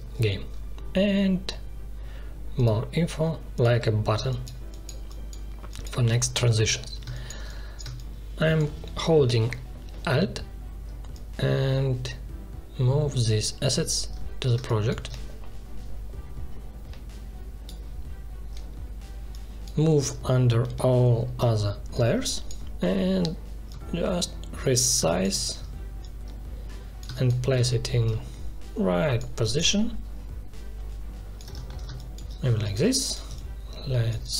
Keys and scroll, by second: 4.1 space, 14.5 space, 20.6 ctrl+shift+[, 25.0 space, 27.0 space, 31.8 space.